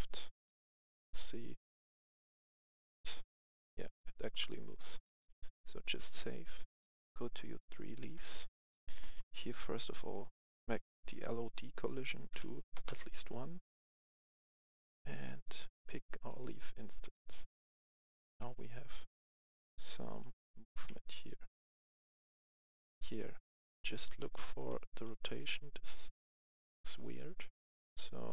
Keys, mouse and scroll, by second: 2.9-6.6 drag, 7.6 right click, 8.5-9.0 scroll down 2, 10.7 click, 10.9 click, 12.4 1, 12.7 Return, 12.9 Return, 13.5-13.8 scroll up 1, 15.1 click, 16.9 click, 17.1 right click, 18.2-19.3 typing, 20.4-23.1 typing, 24.3-25.5 typing, 27.9-28.3 typing.